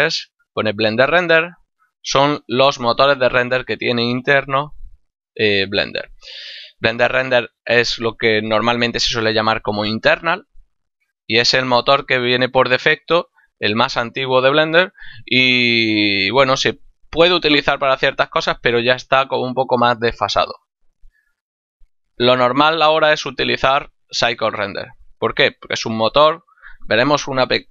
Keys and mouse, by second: 11.1 click, 21.9 click, 26.6 click.